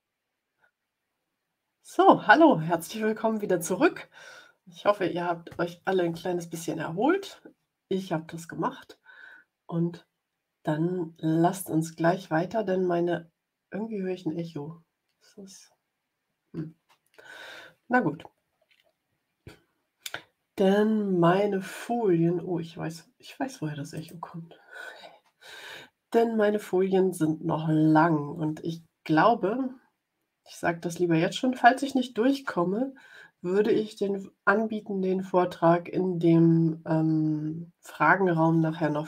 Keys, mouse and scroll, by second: 23.9 click.